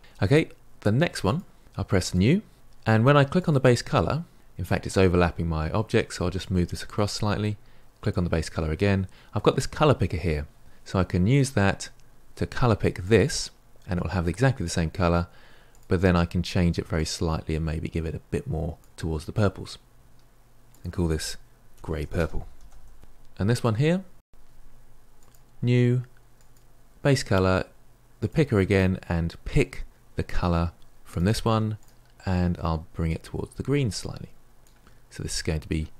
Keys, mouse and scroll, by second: 1.3 click, 2.1-4.3 drag, 6.3-12.9 shift+middle drag, 16.8-19.0 drag, 23.7 click, 25.2-31.0 drag, 33.0 click.